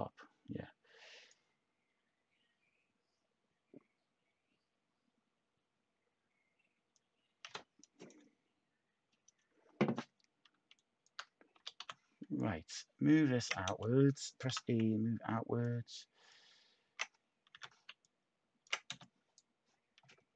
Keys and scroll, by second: 11.3-12.2 typing, 13.6 t, 17.5 h, 18.9 space.